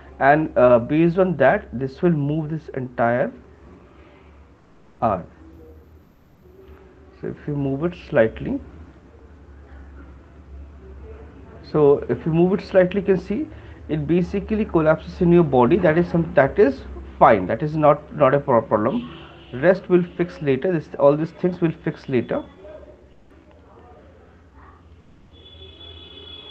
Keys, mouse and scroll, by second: 13.3 click, 18.2 shift+click, 19.4 alt+click, 25.1 shift+click, 26.4 shift+click.